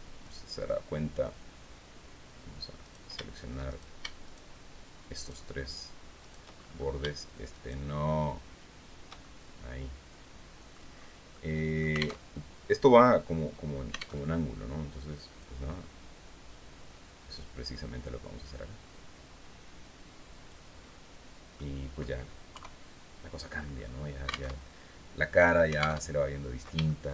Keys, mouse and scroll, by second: 0.1 click, 2.3 right click, 3.2 shift+right click, 3.7 shift+right click, 4.6 shift+right click, 5.7 shift+right click, 6.1-6.4 shift+scroll up 1, 7.0 shift+right click, 8.7-10.4 shift+middle drag, 10.8 middle click, 11.7 alt+Tab, 13.8 alt+Tab, 14.9-20.2 drag, 20.3-20.9 scroll down 4, 21.1 click, 22.0 KP_3, 24.0 alt+Tab, 25.5 alt+Tab, 26.3 shift+middle click.